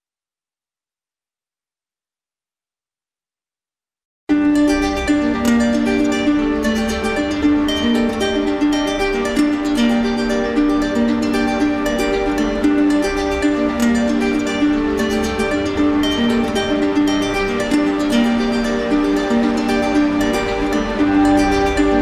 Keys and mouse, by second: 3.8 right click, 5.5-6.6 right drag, 6.7-7.7 drag, 9.8-10.9 right drag, 12.1-13.2 right drag, 13.5-14.6 right drag, 15.3 ctrl+z, 17.5 click, 19.0-20.1 right drag, 20.7-21.7 right drag.